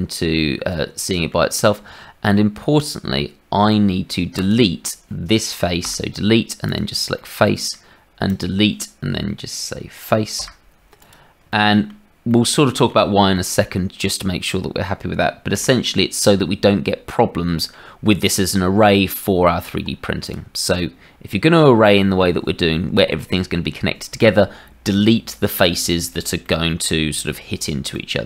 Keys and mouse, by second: 1.8 Tab, 4.3 click, 5.8 Delete, 7.1 middle click, 8.2 click, 10.3 Delete, 12.2 click, 15.5 KP_Divide, 17.1 click, 18.9 Tab, 20.2-22.1 drag, 26.6 middle click, 27.9-28.2 middle drag.